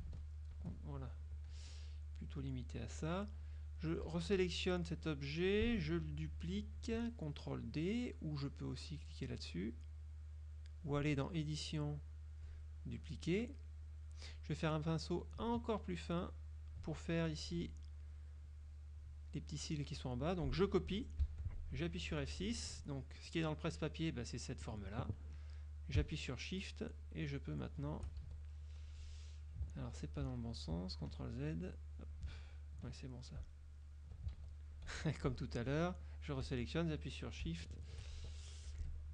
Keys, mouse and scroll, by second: 0.3 ctrl+shift+z, 1.6 F2, 2.1 click, 3.5 click, 4.1 F1, 11.6 click, 13.9 click, 15.2 ctrl+click, 21.3 ctrl+c, 22.3 F6, 27.0 shift+click, 28.3 ctrl+shift+z, 29.0 click, 29.9 ctrl+z, 31.6 ctrl+click, 32.5 ctrl+z, 33.5 ctrl+click, 34.5 ctrl+z, 35.7 F2, 35.8 click, 36.5 F1, 38.8 F6.